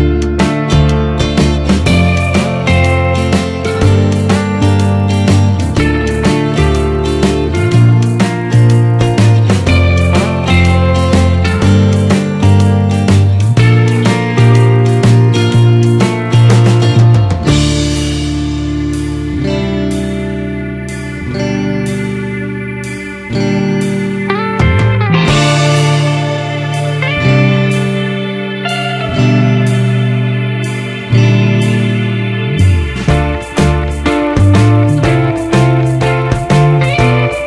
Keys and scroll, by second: 6.2 Return, 9.3 ctrl+=, 9.9 ctrl+space.